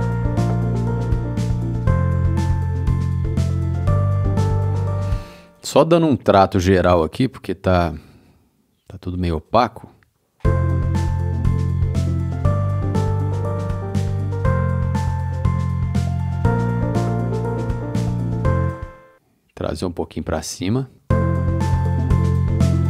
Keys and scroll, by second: 4.9 space, 10.3 space, 15.5 c, 18.5 space, 20.9 space.